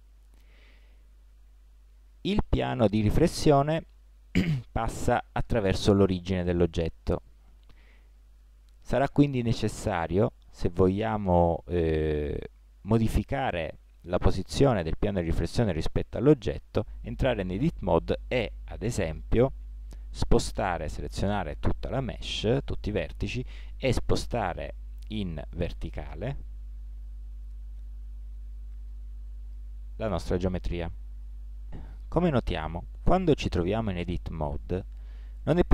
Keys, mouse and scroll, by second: 2.4 middle click, 17.4 Tab, 18.8 z, 21.0 a, 21.3 a, 24.6 g, 31.8 Tab, 33.4 z, 34.2-35.7 middle drag.